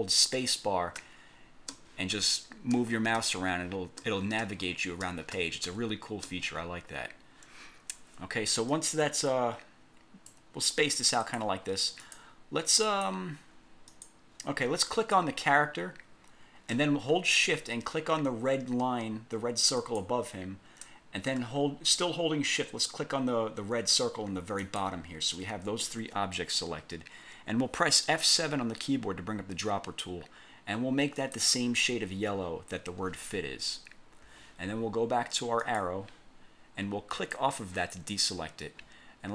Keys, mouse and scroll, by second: 1.1 space, 8.8-10.6 ctrl+drag, 11.3 click, 12.1 click, 13.0 click, 14.0 click, 15.1 click, 20.0 shift+click, 24.8 shift+click, 28.3 F7, 31.3 click, 35.7 click, 37.2 click.